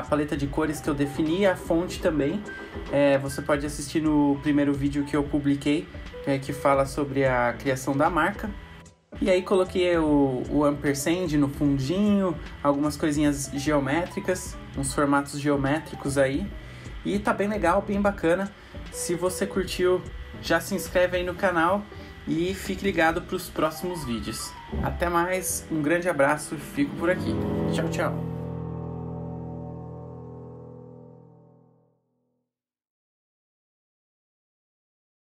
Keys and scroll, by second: 18.7 ctrl+alt+super+2.